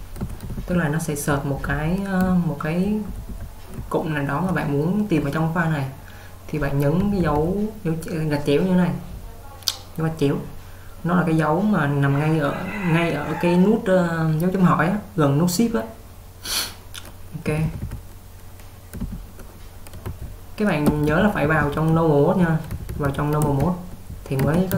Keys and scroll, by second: 0.0-4.7 typing, 7.1-7.4 typing, 17.4-19.1 typing, 20.1-24.6 typing.